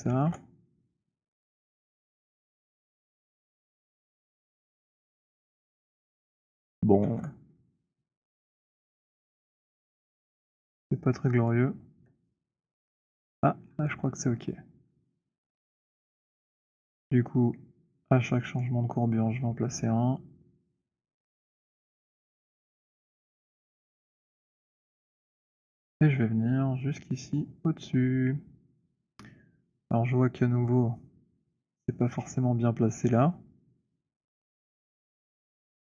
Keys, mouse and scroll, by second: 0.3 ctrl+z, 2.2-3.7 v, 4.2 click, 4.2 v, 4.5 v, 6.9 ctrl+z, 7.6 scroll, 8.1-8.5 scroll, 9.1-9.4 alt+scroll, 10.3-11.2 v, 11.7 click, 11.7 v, 12.0 v, 12.2 v, 13.7-14.3 scroll, 14.8-15.5 scroll, 16.2-19.7 alt+middle click, 18.6 click, 19.6 scroll, 19.8 click, 20.9 click, 22.3 click, 23.6 alt+middle click, 25.1 alt+middle click, 27.1 click, 34.8-35.4 scroll.